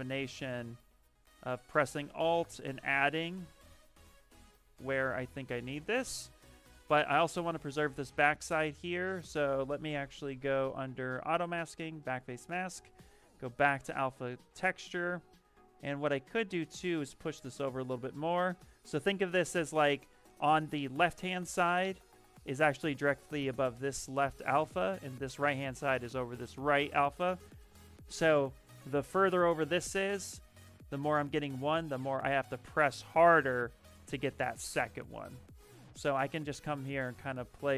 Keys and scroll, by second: 5.8 ctrl+z, 6.0 ctrl+z, 35.2 z.